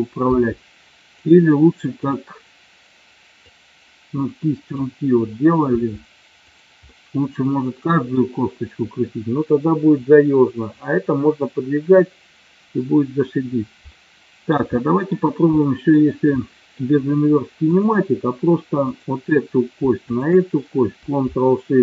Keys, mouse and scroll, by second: 0.4 r, 1.2 click, 3.6-4.9 drag, 5.9 r, 6.6 click, 7.2-8.5 middle drag, 14.0-14.6 middle drag, 14.8 shift+middle click, 15.6 middle drag, 16.4-16.9 middle drag, 18.9 click, 20.0 shift+click.